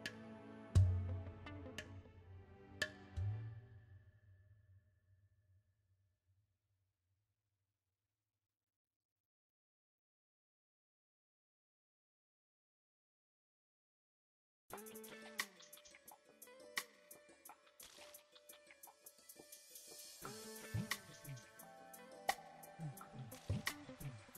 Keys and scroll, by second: 15.2 r, 24.2 KP_0.